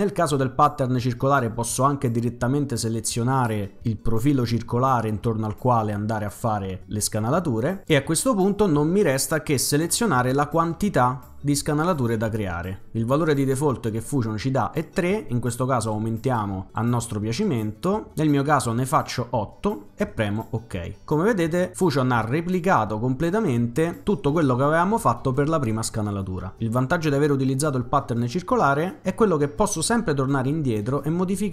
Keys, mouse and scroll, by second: 7.6 click, 15.9 click, 16.3 click, 16.7 click, 17.3 click, 17.8 click, 20.1 click.